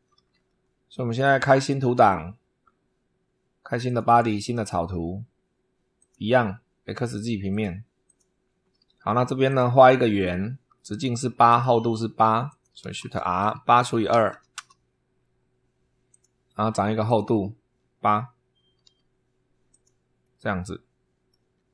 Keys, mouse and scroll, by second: 1.4 click, 3.7 click, 4.2 click, 5.8 click, 7.3 click, 7.9 click, 9.3 click, 10.7 click, 11.3 click, 11.9 Escape, 12.3 click, 12.8-14.6 typing, 15.9 click, 16.9 click, 18.7 8, 19.5 click, 20.0-21.2 drag, 21.2 scroll down 1.